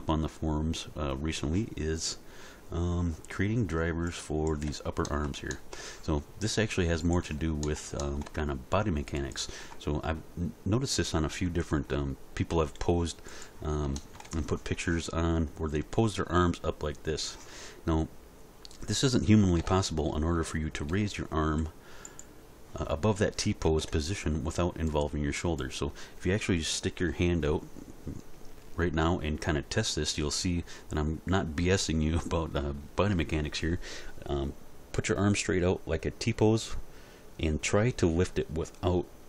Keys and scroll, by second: 12.5 r, 19.6 alt+r, 20.9 r, 23.8 alt+r.